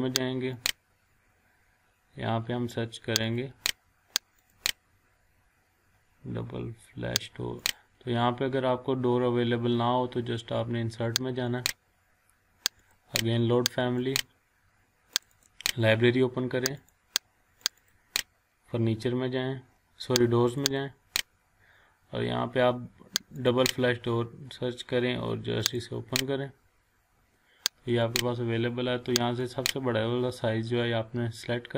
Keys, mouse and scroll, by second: 2.0-3.2 scroll down 1, 4.7 click, 4.9-5.8 scroll down 1, 5.8-6.9 scroll up 1, 7.6 click, 12.2 click, 20.5 click, 23.4 click, 25.8 click, 28.0 click.